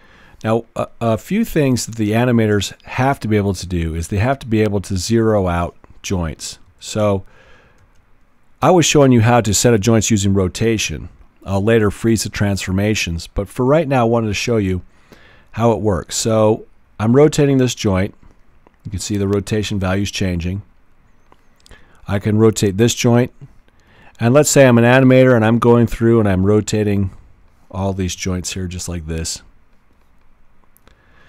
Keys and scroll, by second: 6.7-8.3 typing.